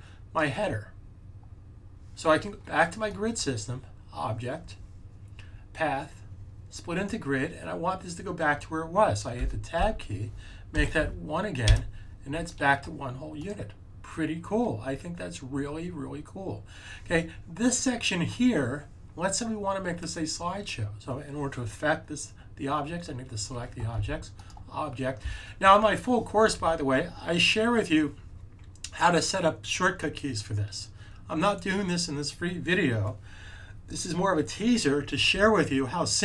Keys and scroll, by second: 10.6 1.